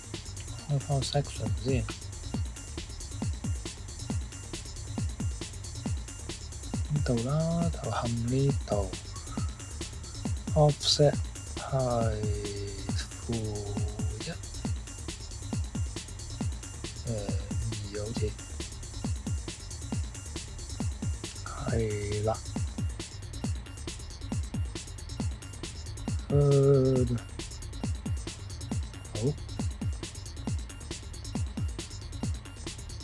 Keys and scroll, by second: 13.8 -, 14.2 1, 16.0 BackSpace, 16.1 BackSpace, 17.6 2, 23.5 typing, 25.2-25.9 typing.